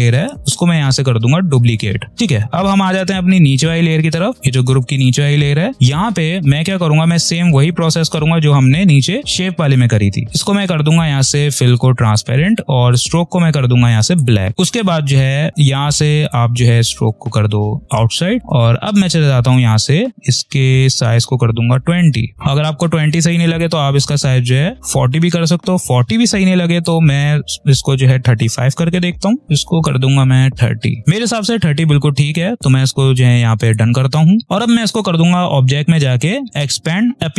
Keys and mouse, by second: 0.7-2.1 drag, 7.4 click, 10.2 click, 16.1 click, 21.8 click, 23.5 click, 29.2 3, 29.4 click, 30.5 3, 31.0 click, 33.5 click, 35.5 click.